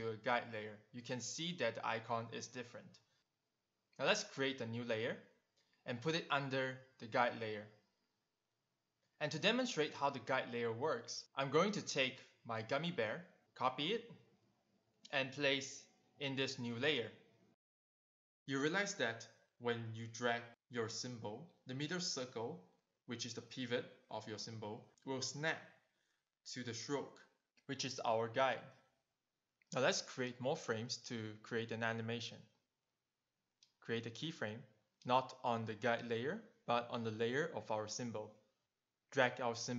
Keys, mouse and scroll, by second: 4.6 right click, 5.7 click, 7.2 click, 9.1 click, 9.9 v, 10.2 click, 11.3 ctrl+c, 11.6 click, 12.3 ctrl+v, 12.8 click, 14.1 q, 14.7 shift+click, 23.7 click, 28.3 click, 29.0 click, 29.5 click, 30.4 right click, 31.6 click, 33.3 right click, 34.7 click, 35.1 click, 35.7 right click, 37.0 click, 38.5 click.